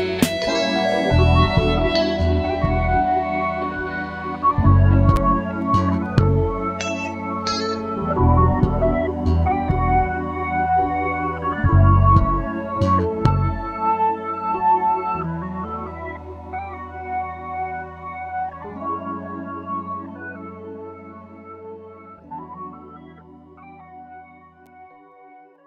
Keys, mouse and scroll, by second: 0.8 click, 3.4 click, 4.5 shift+click, 5.5 ctrl+KP_Add, 7.4 ctrl+z, 8.3 ctrl+z, 9.1 ctrl+click, 10.6 click, 11.7 click, 12.7 click, 13.7 click, 15.4 click, 16.9 shift+click, 17.8 ctrl+KP_Add, 20.5 click, 21.5 click, 22.4 click, 23.7 click, 24.7 shift+click.